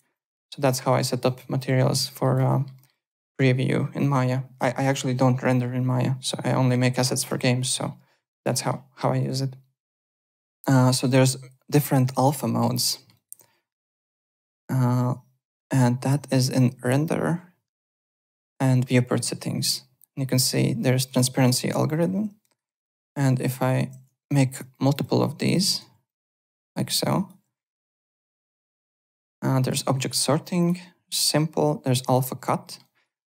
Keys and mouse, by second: 0.1 alt+click, 0.7 click, 1.0 alt+middle click, 1.2 alt+right click, 1.3 alt+click, 2.2 alt+right click, 2.4 alt+middle click, 2.9 alt+right click, 8.3 alt+right click, 8.5 alt+middle click, 9.2 alt+Tab, 10.2 alt+click, 10.9 click, 12.1 alt+right click, 12.6 alt+click, 12.8 alt+middle click, 13.1 alt+right click, 14.1 click, 18.7 click, 21.0 click, 21.8 click, 22.4 alt+right click, 22.9 click, 22.9-24.1 typing, 23.4 click, 23.9 ctrl+d, 24.7 alt+click, 25.6 ctrl+d, 25.8 w, 26.1 click, 26.5 ctrl+d, 26.7 w, 26.9 click, 27.4 `, 27.6 click, 27.8 alt+middle click, 28.1 alt+click, 28.9 click, 29.6 click, 30.5 click, 32.0 click, 32.6 alt+middle click, 32.8 alt+right click, 33.2 alt+middle click.